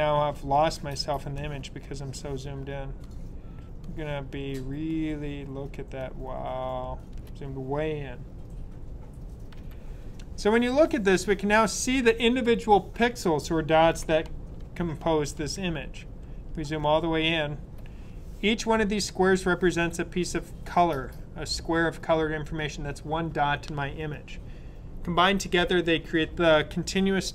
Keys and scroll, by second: 14.5 super+=, 14.9 super+=, 15.3 super+=, 16.1 super+=, 16.5 super+=.